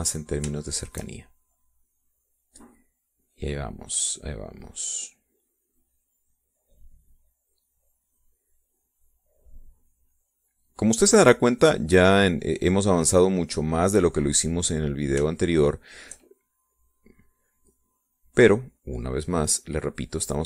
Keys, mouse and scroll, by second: 0.1-1.9 drag, 2.8-12.3 shift+drag, 12.8 middle click, 13.4-14.6 drag, 14.9-16.1 drag, 16.3 middle click, 16.9 shift+click, 18.2-20.4 drag.